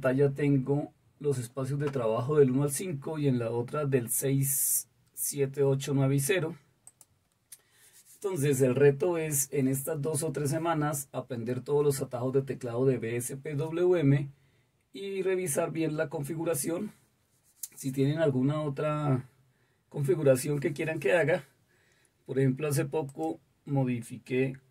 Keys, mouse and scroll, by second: 23.0 click.